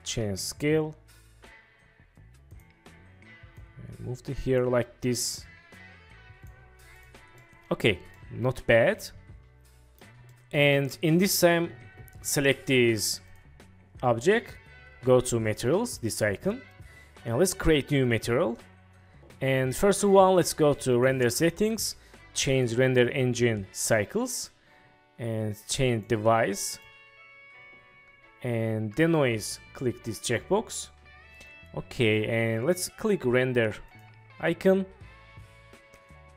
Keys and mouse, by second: 2.6 click, 7.1 drag, 7.5 middle click, 8.2-10.1 middle drag, 10.6-11.0 middle drag, 13.4 click, 18.1 click, 21.0 click, 22.7-24.0 drag, 26.1-27.1 drag, 29.4 click.